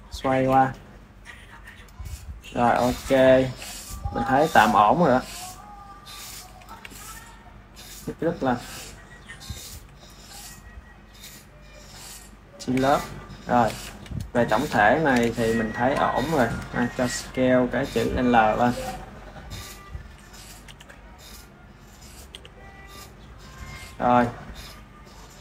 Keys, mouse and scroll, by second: 0.7 click, 4.2 ctrl+s, 5.8 ctrl+s, 5.9 click, 6.5 KP_1, 6.8 KP_3, 7.7 r, 9.6 KP_1, 10.3 click, 13.0-14.0 middle drag, 14.0 KP_1, 15.4 shift+middle click, 16.2 drag, 16.7-18.5 s, 19.9 r, 20.6 g, 22.1 g, 23.8 click, 24.5-25.4 ctrl+middle drag.